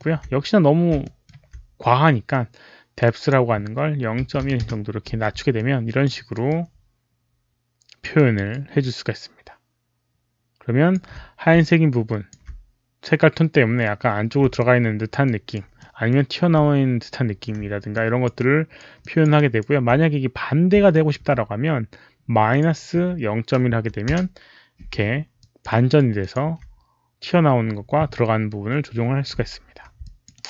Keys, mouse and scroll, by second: 0.9 alt+middle click, 2.9 alt+click, 3.2 alt+middle click, 3.2 alt+right click, 4.4 KP_1, 4.5 Return, 5.5 alt+click, 5.8 alt+middle click, 5.8 Return, 5.8 KP_1, 5.8 KP_Decimal, 6.0 alt+right click, 6.4-7.9 alt+drag, 8.0 alt+right click, 8.7-10.8 alt+drag, 11.5 alt+click, 14.5 alt+click, 15.1 alt+right click, 15.7 alt+middle click, 15.8 alt+click, 17.9 alt+click, 18.4 alt+right click, 18.9 alt+middle click, 19.0 alt+click, 19.0 alt+middle click, 19.2 alt+right click, 20.8 alt+click, 22.4 alt+click, 22.4 alt+right click, 22.4 alt+middle click, 23.6 KP_Subtract, 24.0 Return, 24.0 KP_Decimal, 24.8 Return, 24.8 KP_Subtract, 24.8 alt+right click, 24.8 KP_Decimal, 25.3 alt+click, 25.7 alt+right click, 26.1 alt+click, 29.9 Return, 29.9 KP_Subtract, 29.9 alt+click, 29.9 KP_Decimal, 30.3 alt+right click.